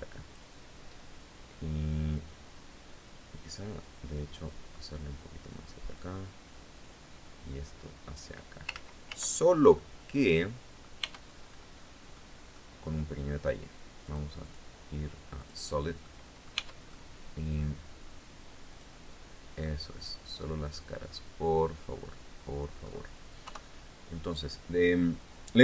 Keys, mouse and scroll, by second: 3.0-4.1 drag, 5.5-7.9 drag, 8.3 ctrl+z, 9.3-10.5 ctrl+drag, 10.5 Tab, 10.9-11.3 scroll up 2, 11.7 click, 13.6 click, 14.0 click, 14.9 click, 15.6 middle click, 16.1 Tab, 16.5 middle click, 18.3 click, 19.2-22.5 middle drag, 22.9 KP_3, 23.5 scroll down 2.